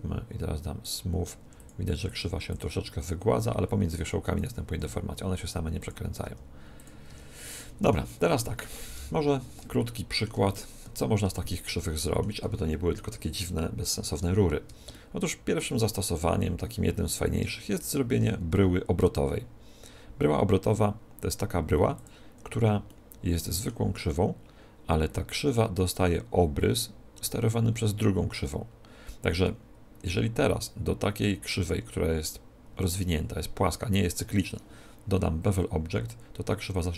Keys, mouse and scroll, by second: 1.0 w, 1.4 w, 1.9 w, 2.4 w, 4.4-6.1 right drag, 4.7 r, 5.9-7.5 drag, 6.2 g, 7.0 Tab, 7.5-13.0 middle drag, 8.9 KP_1, 10.4 x, 14.8-16.7 middle drag, 17.7 shift+a, 22.8-24.6 middle drag.